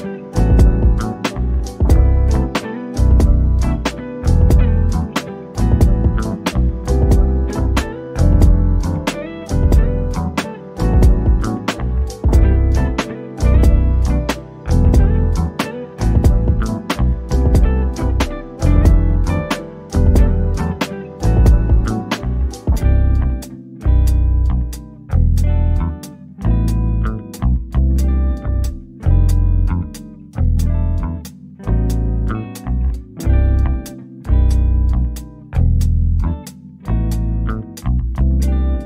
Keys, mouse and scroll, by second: 1.8 click, 7.1 2, 9.7-10.4 typing, 14.6 click, 19.5-21.5 drag, 21.5-22.0 scroll up 1, 22.8-27.3 drag, 27.3-28.1 scroll down 1, 28.1 click, 29.2 Escape, 30.8 click, 32.7 scroll up 1, 33.7 Escape, 35.3 shift+click, 36.1 scroll down 1, 37.4 scroll up 1.